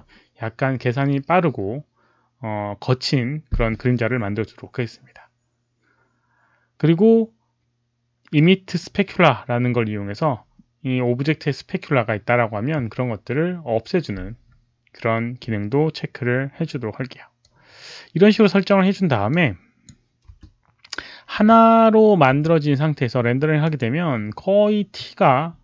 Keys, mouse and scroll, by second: 8.6 click, 17.3-18.2 drag, 19.2 click, 20.2 space, 21.4 space, 22.2 space, 23.6 click.